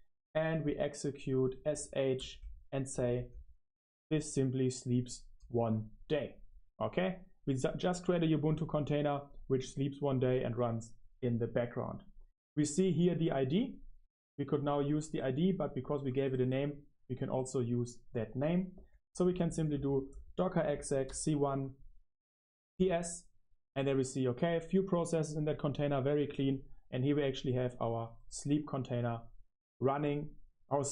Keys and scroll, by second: 0.0 ctrl+alt+shift+3, 2.3-10.8 typing, 15.4 Return, 22.7-28.6 typing.